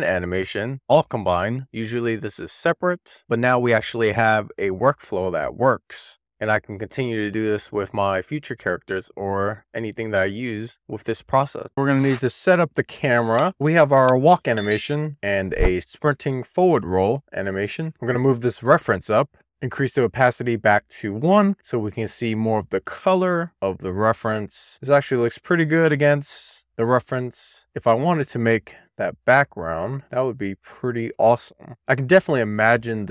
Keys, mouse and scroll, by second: 12.9-14.3 middle drag, 14.4 shift+scroll up 1, 14.5 shift+middle click, 16.8-17.2 scroll down 2, 17.8 scroll up 1, 18.0 middle click, 18.4 click, 18.8 alt+middle click, 19.2 click, 19.7 middle click, 20.9-21.8 scroll down 1, 21.8 click, 22.7 scroll down 1, 23.0 middle click, 23.9-24.3 scroll up 1, 24.3-30.1 middle drag, 30.3-31.1 scroll up 3, 31.1-32.1 scroll down 5, 32.1 middle click, 32.4-32.9 shift+middle drag, 33.0-33.1 middle drag.